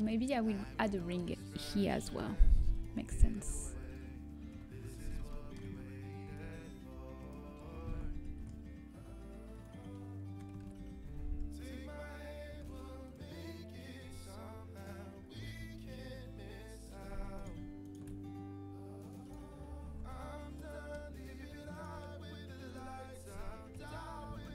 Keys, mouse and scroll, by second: 0.9 Tab, 3.7 ctrl+r, 4.4 KP_1, 7.1 g, 9.2 ctrl+b, 12.5 alt+e, 15.5 s, 17.5-19.7 right drag, 19.2-21.8 drag, 19.5-22.6 middle drag, 21.8-23.6 right drag, 21.8 a, 22.6-24.5 drag, 23.6 KP_1.